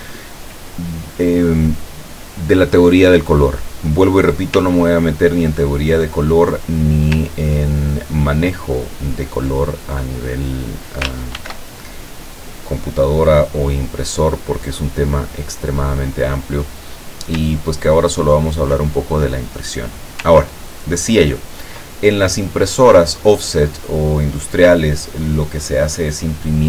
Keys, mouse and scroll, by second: 2.7 click, 3.4 click, 4.8-6.1 ctrl+drag, 6.2 ctrl+click, 7.8-9.4 ctrl+drag, 9.8 ctrl+click, 11.4 ctrl+shift+f, 12.7 click, 13.7 click, 14.8 click, 16.1 click, 17.7 ctrl+click, 19.0 ctrl+click, 20.6 ctrl+click, 22.2-24.6 ctrl+drag.